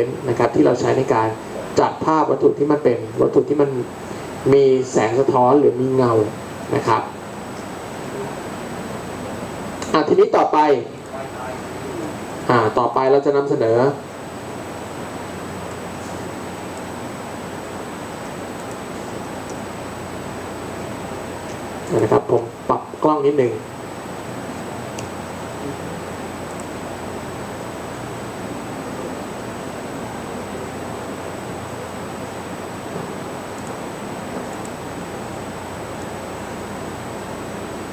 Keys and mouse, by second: 11.0-15.7 drag, 29.5 shift+d, 34.9-37.3 right drag, 37.3 click.